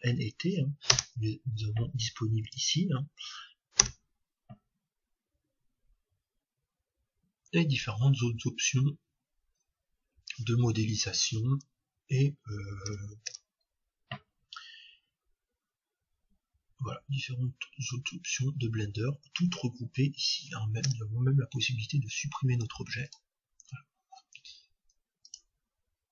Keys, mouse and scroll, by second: 1.1 space, 13.3 space, 20.9 space, 25.2-26.1 drag.